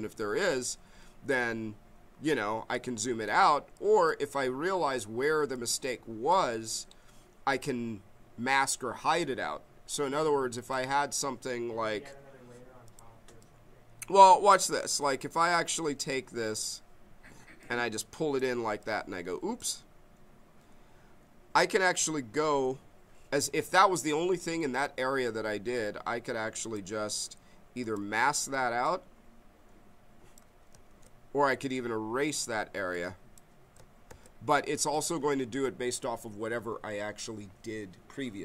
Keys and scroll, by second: 30.9 ctrl+z, 34.1 ctrl+z.